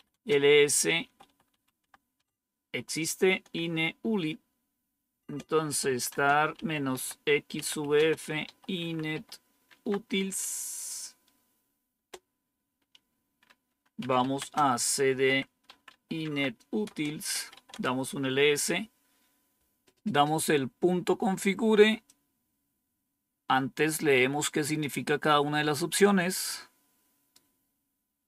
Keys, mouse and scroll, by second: 0.0-9.5 typing, 2.0 Tab, 9.6 Tab, 11.8 Return, 13.6-18.0 typing, 21.9-24.7 drag, 26.2-27.9 right drag.